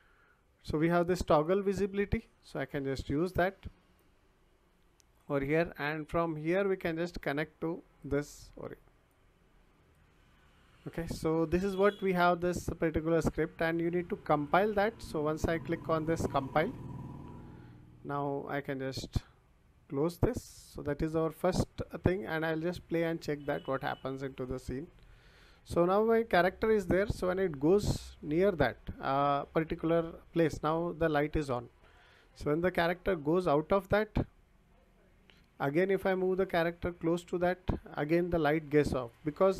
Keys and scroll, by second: 26.2 w, 34.2 s, 35.7 w, 38.1 s.